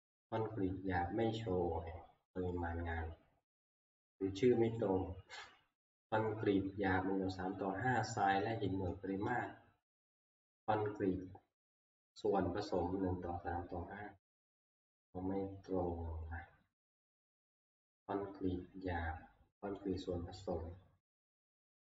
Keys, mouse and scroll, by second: 0.4 click, 1.4 click, 2.6 click, 9.1 alt+Tab, 20.0 click.